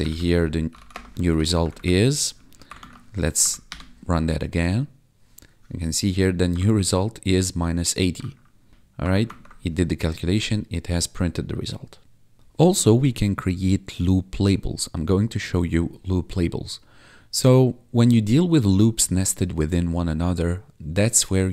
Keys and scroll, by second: 0.4-1.2 typing, 1.5 ctrl+Down, 2.7 ctrl+`, 3.3 Up, 3.6 Return, 6.6 1, 8.4 1, 8.7 BackSpace, 9.2 ctrl+`, 12.4 Tab.